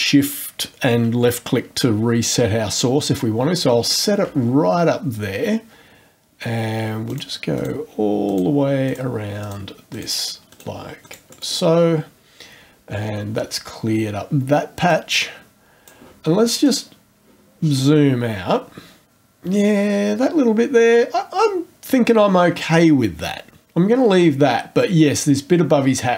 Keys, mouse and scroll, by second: 3.9 shift+click, 7.1 click, 7.6 click, 8.3 click, 8.9 click, 9.4 click, 9.9 click, 10.5 click, 11.0 click, 11.3 right click, 14.9 click, 16.6 click, 17.6-18.0 scroll down 2, 25.1-25.7 scroll up 1.